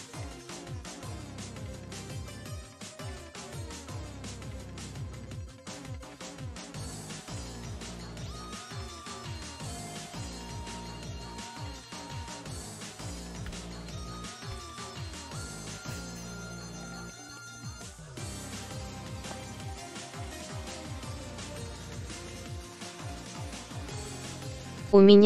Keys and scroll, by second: 8.5 4, 9.3 4, 10.4 4, 11.6 shift+d, 12.0 shift+d, 12.6 4, 13.6 4.